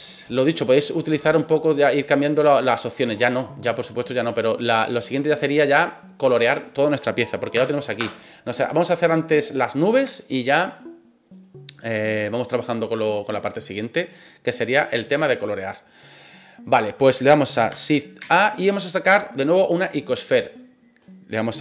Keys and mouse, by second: 2.1-3.7 drag, 4.6 right click, 7.5 KP_0, 8.0 KP_0, 9.4-9.8 middle drag, 10.1-10.4 shift+middle drag, 12.6 click, 16.6 click, 18.2 shift+a.